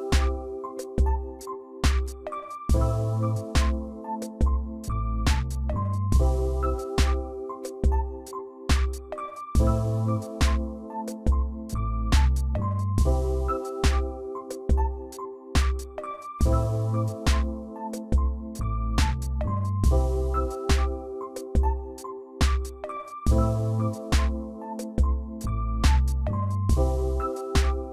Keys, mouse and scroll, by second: 2.1 ctrl+t, 3.6 shift+click, 7.9-9.0 Left, 9.5 click, 9.7 click, 9.9 click, 10.2 click, 11.1 click, 12.6 ctrl+j, 13.5 ctrl+j, 15.2 ctrl+t, 20.6 Left, 21.1 Left, 21.3 Left, 22.7 Right, 23.4-24.1 Right, 24.9 Down, 25.7 Up, 26.0 Right, 26.8 Right, 27.0 Right, 27.7-27.9 Right.